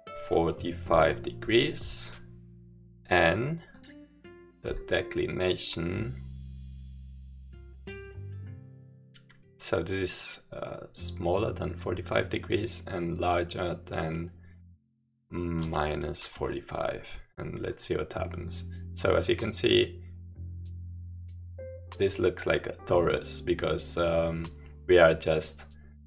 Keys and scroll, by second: 0.1-1.0 typing, 15.4-16.8 typing.